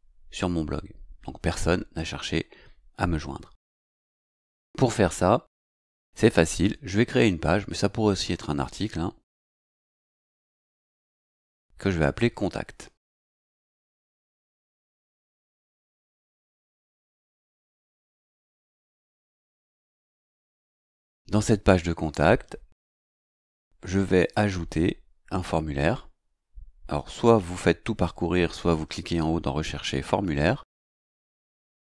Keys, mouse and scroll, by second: 11.1 click, 17.5-19.6 typing, 24.2 click, 29.1-31.7 typing.